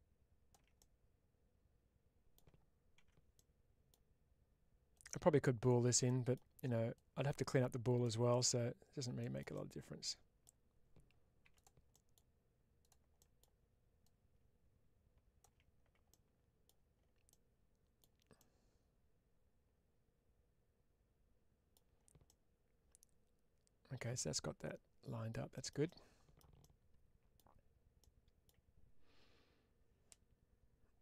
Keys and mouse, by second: 0.6-2.2 middle drag, 2.9 2, 3.2 middle click, 4.8 click, 5.9 middle click, 6.8-7.9 drag, 8.2 middle click, 11.3 1, 11.4 click, 11.8 middle click, 12.7 click, 13.1 middle click, 13.9-15.3 drag, 16.0 middle click, 17.1 middle click, 18.2-21.6 middle drag, 22.1-25.3 middle drag, 25.8 middle click, 26.5 middle click, 27.9 middle click.